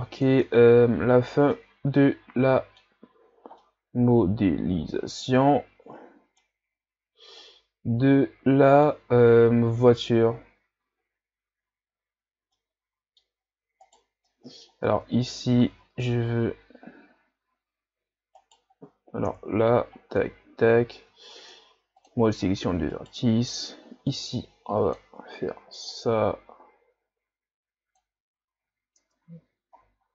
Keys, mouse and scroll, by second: 0.5 Tab, 0.8 a, 1.2-1.5 scroll down 2, 1.5-3.1 middle drag, 3.1-3.4 scroll up 5, 3.6-6.6 middle drag, 6.7-7.4 scroll down 4, 7.4-10.4 middle drag, 12.3 scroll down 1, 12.5-13.4 middle drag, 13.4-13.8 scroll up 2, 13.8 right click, 14.3-14.9 middle drag, 14.9 Tab, 15.7 s, 19.3 KP_3, 20.0-20.4 scroll down 2, 20.4 z, 21.4 ctrl+Tab, 22.9 right click, 23.3 b, 25.9-28.7 drag, 28.7 z, 29.0 Tab, 29.4 a, 29.8-30.1 scroll down 1.